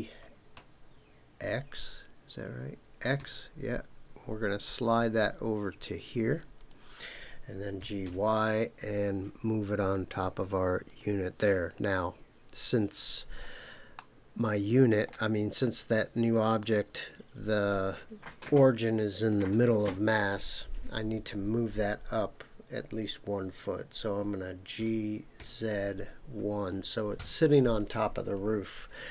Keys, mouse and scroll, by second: 3.1 x, 6.6 click, 7.8 g, 8.1 y, 10.8 click, 13.0 scroll up 2, 13.9-15.2 middle drag, 24.7 g, 25.3 z, 26.3 KP_1, 27.1 KP_Enter.